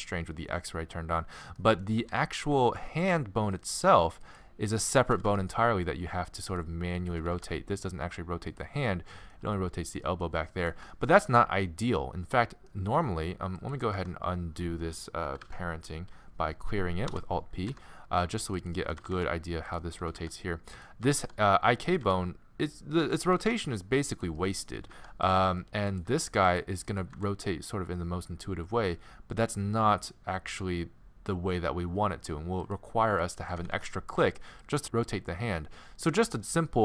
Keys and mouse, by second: 0.1 middle click, 1.1 middle click, 2.0 g, 4.3 click, 5.1 r, 7.2 r, 13.6-17.1 drag, 14.0 Tab, 15.4 alt+p, 17.7 Tab, 19.0 r, 20.1 r, 21.1 r, 22.0 r, 23.3 r, 24.9 r, 25.1 middle click, 26.0-29.5 drag, 27.1 g, 33.2-34.8 drag, 33.6 r.